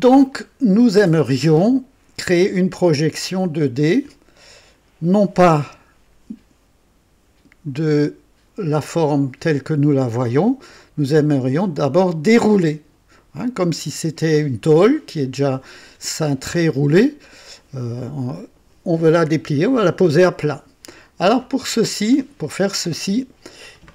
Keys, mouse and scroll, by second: 0.3-3.9 drag, 4.5-5.3 drag, 5.6 KP_2, 10.4-11.9 drag, 13.2-14.3 drag, 20.9 click, 21.6-22.2 right drag, 22.1 middle click, 22.4-23.8 drag.